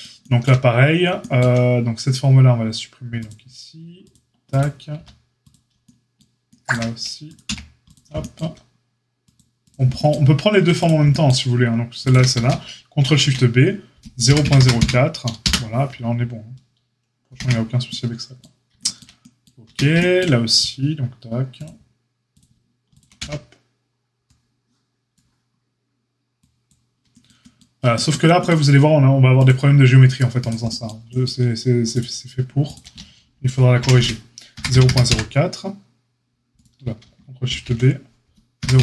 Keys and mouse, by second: 3.2 click, 4.1-4.4 middle drag, 4.4 click, 4.5-7.2 middle drag, 4.9 x, 7.2 click, 7.3-9.3 middle drag, 7.4 x, 9.3-10.8 drag, 10.8-12.0 shift+middle drag, 12.0 shift+click, 12.0-15.4 ctrl+shift+middle drag, 13.0 ctrl+shift+b, 15.4 click, 16.0-22.1 middle drag, 17.3 Tab, 19.6 Tab, 21.6 click, 22.3 shift+middle click, 22.9 shift+click, 22.9-29.3 shift+middle drag, 23.1 x, 29.3 click, 29.4-30.3 middle drag, 30.3-31.9 drag, 31.9-38.8 shift+middle drag, 33.7 ctrl+shift+b, 37.4 ctrl+shift+b.